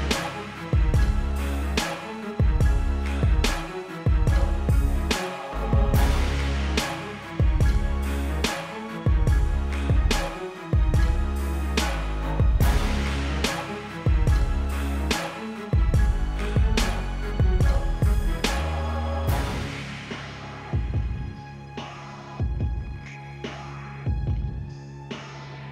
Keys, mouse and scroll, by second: 1.2 click, 4.4 =, 5.6 click, 23.4 ctrl+l, 24.1 click.